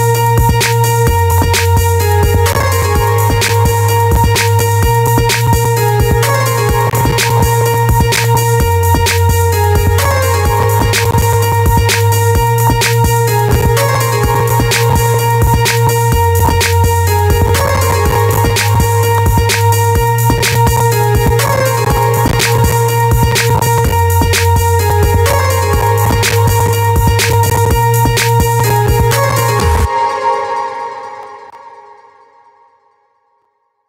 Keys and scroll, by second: 29.2 space.